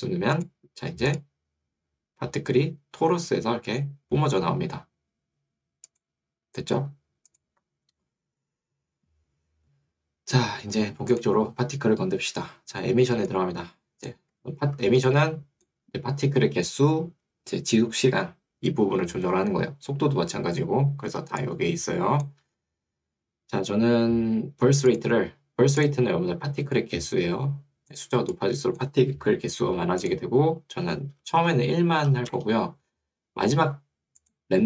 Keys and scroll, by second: 14.4 Escape, 16.0 Escape, 21.4 2, 22.6 Escape, 29.2 Escape, 30.8-31.7 typing, 32.4 Return.